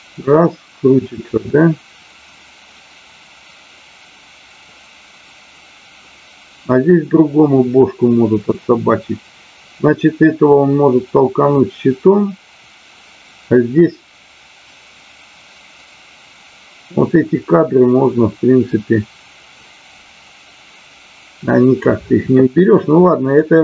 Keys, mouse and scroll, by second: 23.3-23.6 drag.